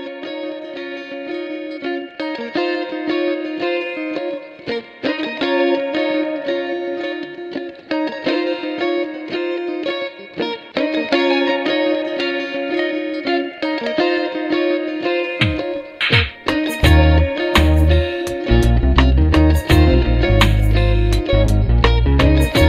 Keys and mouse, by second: 16.4 space, 20.9 double click.